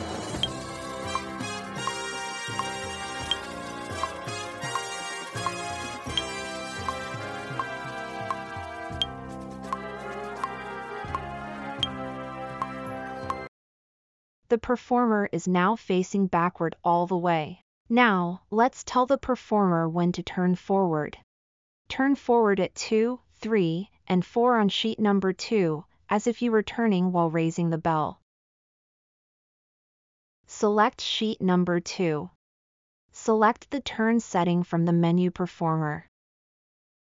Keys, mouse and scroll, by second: 22.7 click, 22.7 right click, 32.9 scroll up 4, 33.0 scroll, 33.4-33.8 middle drag, 34.8 click, 34.8 right click.